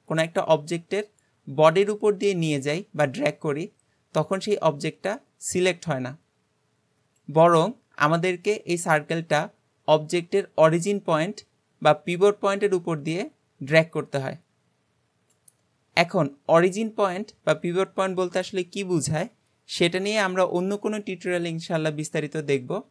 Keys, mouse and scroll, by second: 16.0-19.0 scroll up 1.